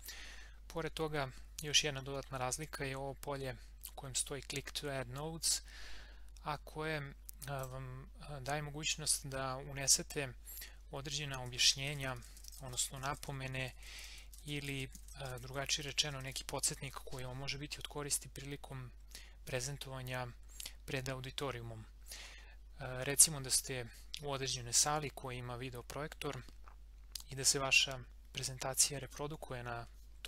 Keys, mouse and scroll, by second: 7.6 click, 11.4-16.8 typing.